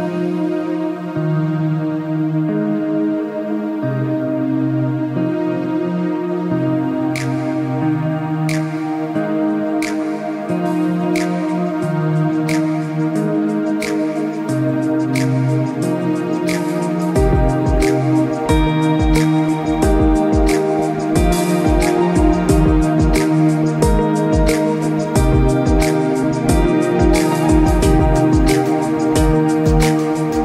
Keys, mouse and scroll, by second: 1.7 click, 19.4 click.